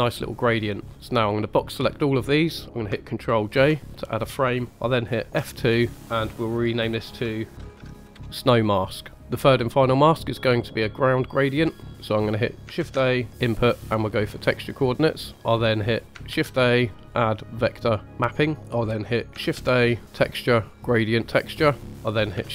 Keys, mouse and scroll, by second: 0.1-0.5 middle drag, 0.8 scroll down 1, 1.0-2.1 drag, 3.5 ctrl+j, 5.3 F2, 11.8 click, 12.7 shift+a, 16.3 shift+a, 19.4 shift+a, 21.9 click, 21.9 right click, 21.9 middle click, 21.9 scroll up 2, 22.4 shift+a.